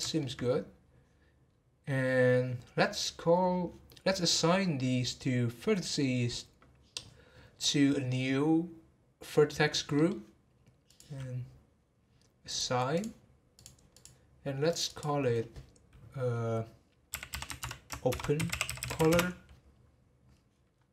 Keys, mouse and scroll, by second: 1.5-3.8 scroll up 4, 3.8-7.0 middle drag, 9.9 middle click, 10.9-13.0 drag, 13.5 click, 14.7 click, 14.9-17.9 drag, 20.7-20.9 scroll down 1.